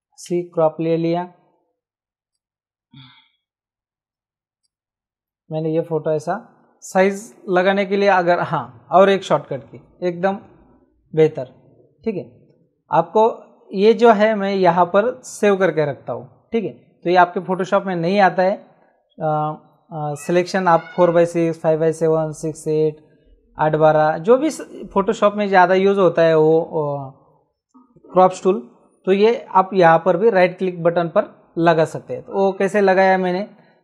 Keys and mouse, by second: 0.2 c, 2.3 click, 4.6 click, 6.9 Escape, 13.8 right click, 32.7 click.